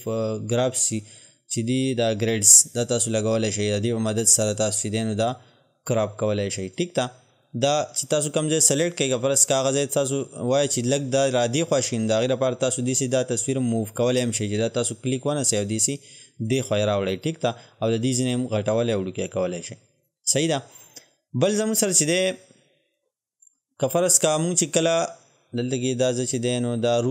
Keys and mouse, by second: 3.0-12.2 drag, 12.2-20.0 drag, 23.0 click.